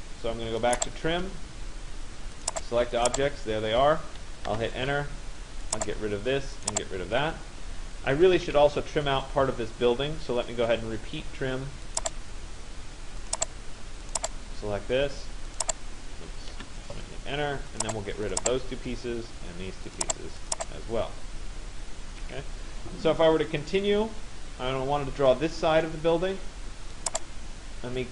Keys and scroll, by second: 4.2 Return, 8.5 Escape, 16.2 Return, 21.9 Escape.